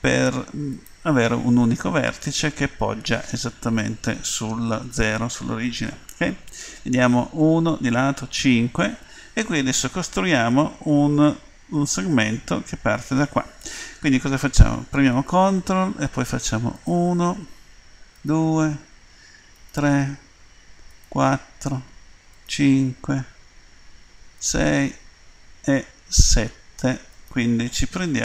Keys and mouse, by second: 6.8 KP_1, 8.1 KP_5, 16.7-28.2 drag.